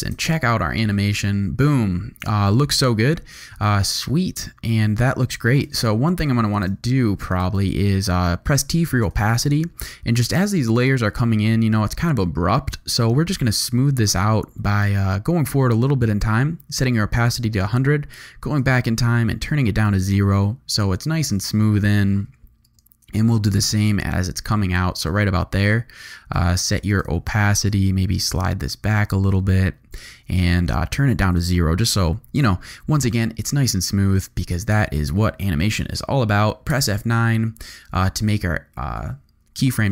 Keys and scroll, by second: 0.1 0, 5.5 space, 7.6 shift+t, 8.6 t, 19.9 space, 22.6 space, 33.4 `, 36.7 F8, 37.4 F9, 39.0 `.